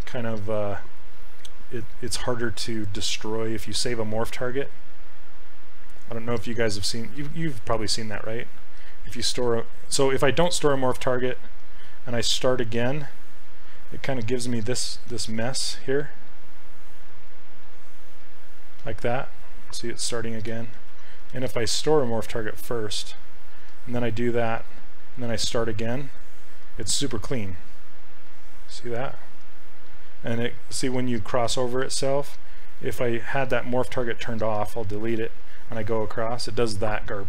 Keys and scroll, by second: 4.6 ctrl+z, 9.2 ctrl+z, 15.2 ctrl+z, 20.6 ctrl+z, 20.8 ctrl+z, 21.4 ctrl+z.